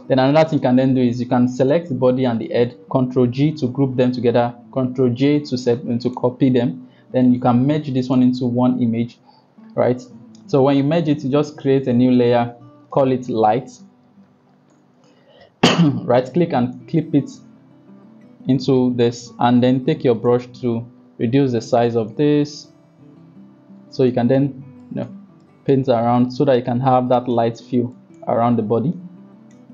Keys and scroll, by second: 3.2 ctrl+g, 4.8 ctrl+j, 13.4 Caps_Lock, 13.4-14.9 typing, 20.9 [.